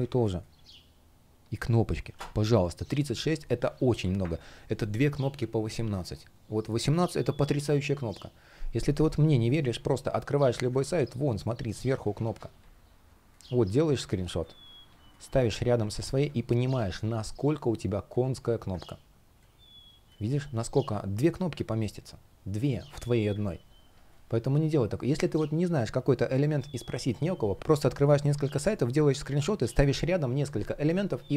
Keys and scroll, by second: 10.5 super+3, 15.1 shift+o, 15.8 super+v, 23.8 space.